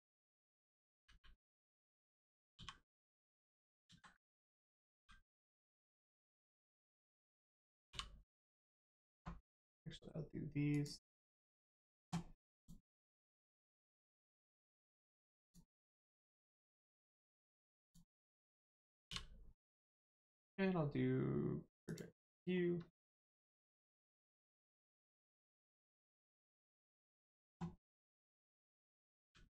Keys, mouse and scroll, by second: 0.5 click, 1.0 u, 2.5 h, 3.8 ctrl+z, 4.9 z, 5.6 click, 7.9 u, 10.7 click, 11.5-11.9 scroll up 1, 12.5 click, 15.4 click, 17.7 click, 18.3-19.1 scroll up 1, 21.8 click, 22.5 scroll down 1, 24.4 click, 25.5 middle click, 26.1-28.1 scroll down 1, 28.1 click, 29.2 g.